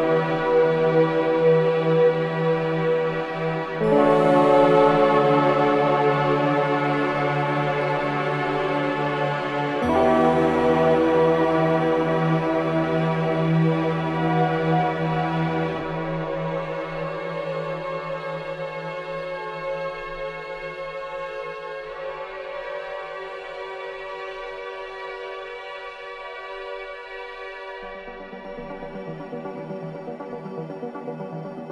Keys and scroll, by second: 0.0 6, 8.8 7, 9.1 0, 13.1 space.